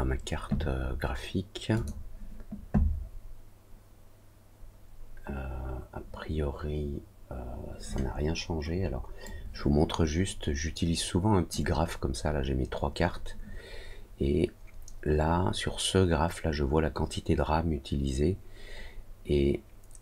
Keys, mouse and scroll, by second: 1.7 click.